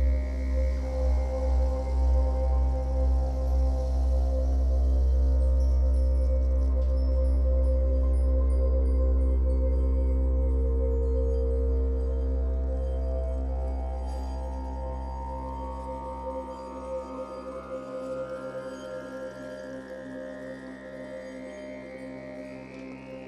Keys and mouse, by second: 1.7 space, 1.8 click, 1.8 space, 9.2 space, 9.6 click, 10.5 space, 13.1 ctrl+-, 13.5 space, 19.0 click, 20.2 space, 20.3 click, 20.5 space, 20.6 ctrl+=, 20.7 ctrl+=, 22.5 click, 23.1 Escape.